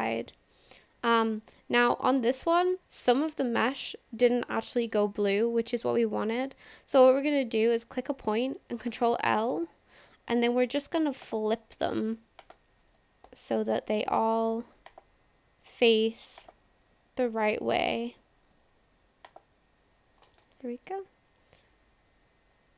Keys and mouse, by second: 1.6 middle click, 2.5 shift+middle click, 3.3-5.0 middle drag, 5.7 click, 6.4 middle click, 7.5 click, 9.0 ctrl+l, 10.3 alt+n, 12.4 click, 13.3 ctrl+l, 14.1 alt+n, 17.3 ctrl+l, 18.5 alt+n, 20.5 click, 20.6 middle click, 21.6-22.7 middle drag.